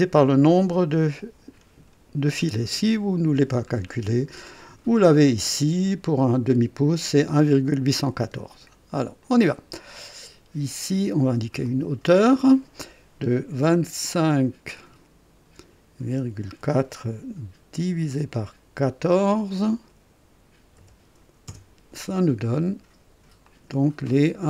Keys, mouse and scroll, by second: 3.1-3.5 scroll down 2, 9.2 click, 11.6 click, 13.6 KP_2, 14.2 KP_5, 16.1 KP_Decimal, 16.5 KP_4, 18.0 KP_Divide, 19.2 typing, 20.7-21.4 typing, 21.4 KP_Enter, 23.4 click.